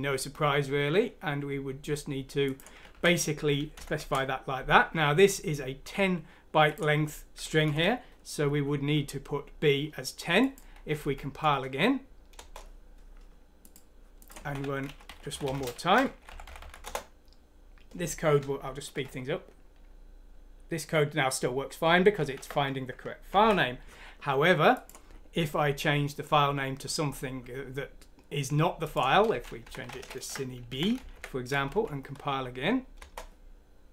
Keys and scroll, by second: 2.9 ctrl+v, 3.8 Home, 4.0 Delete, 7.7 ctrl+Home, 11.0 F9, 12.4 Return, 14.4-16.6 typing, 16.8 Return, 18.9 F4, 22.2 F3, 23.3 ctrl+F9, 29.7 Right, 30.2 b, 31.0 ctrl+Home, 31.8 ctrl+F9, 33.0 Return.